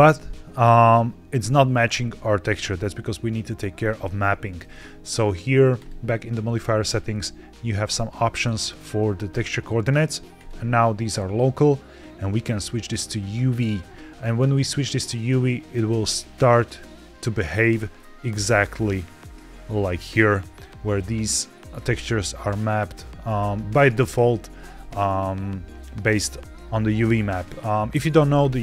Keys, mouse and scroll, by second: 2.1-2.9 middle drag, 5.6 click, 6.7-8.7 scroll down 2, 10.2-15.3 drag, 17.6 middle click, 18.6 click, 20.5 click, 20.8 click.